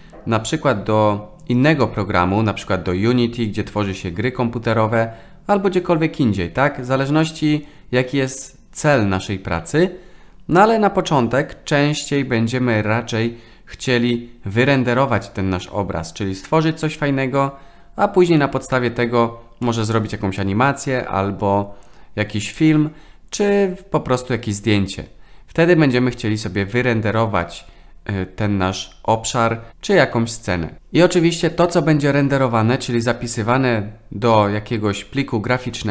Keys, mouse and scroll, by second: 19.6-22.6 middle drag.